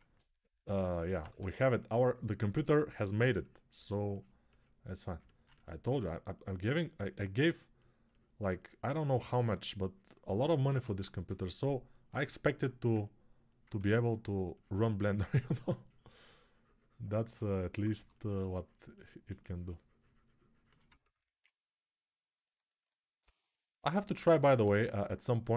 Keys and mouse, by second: 1.0 2, 10.1-19.1 right drag, 10.4 1, 17.7 2, 24.4 1.